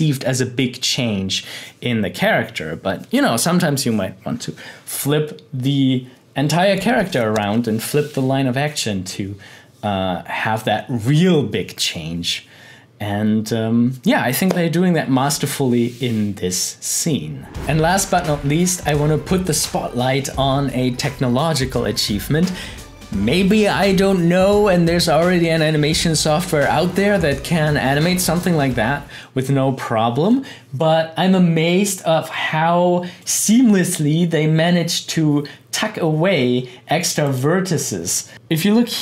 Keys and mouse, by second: 37.4 click.